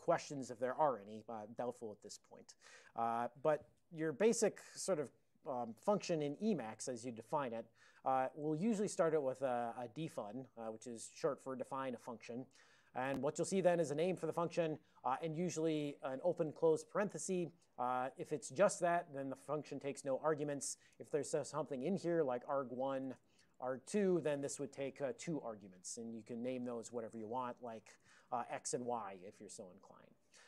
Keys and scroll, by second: 5.7 ctrl+/, 5.7 d, 6.1 alt+n, 6.5 Tab, 8.7 ctrl+n, 8.9 ctrl+n, 9.0 ctrl+n, 9.5 alt+f, 13.7 alt+f, 14.1 alt+f, 16.4 ctrl+f, 16.6 ctrl+f, 16.7 ctrl+f, 18.7 ctrl+b, 21.9-24.7 typing, 27.7 alt+BackSpace, 28.1 alt+BackSpace, 28.3 x, 28.6 space, 28.7 y.